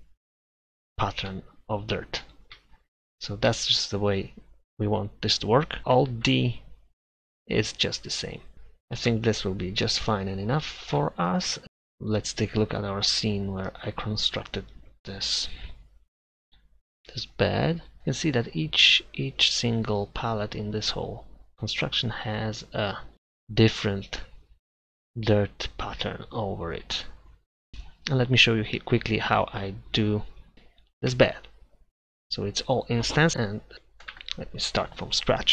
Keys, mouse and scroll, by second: 1.3 Delete, 2.6 Delete, 3.5 Delete, 5.8 alt+a, 5.8 Escape, 6.2 alt+d, 8.0 alt+d, 8.5 Delete, 9.1 Delete, 10.2-11.6 middle drag, 12.5-13.5 middle drag, 30.5 Delete, 31.2 Delete, 33.7 Tab, 34.2 Tab, 35.4 Tab.